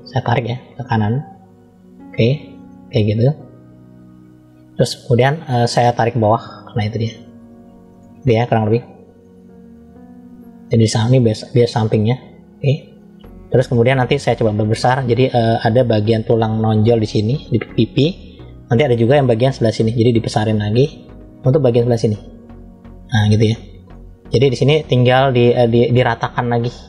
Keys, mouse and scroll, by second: 0.3 click, 5.9 click, 7.8-9.1 middle drag, 9.1-9.5 scroll down 1, 10.0 click, 12.8 middle click, 13.9 scroll down 1, 15.1 middle click, 18.9 middle click, 18.9 scroll down 1, 20.0 f, 21.3 click, 23.2 middle click, 24.2-24.6 scroll up 2, 26.5 click.